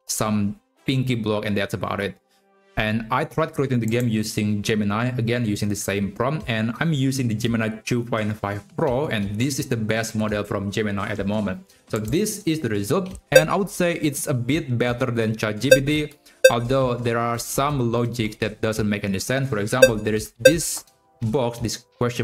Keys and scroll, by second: 16.2 Left, 17.8 Right, 19.5 Up, 19.8 Left, 20.1 Up, 20.3 Right.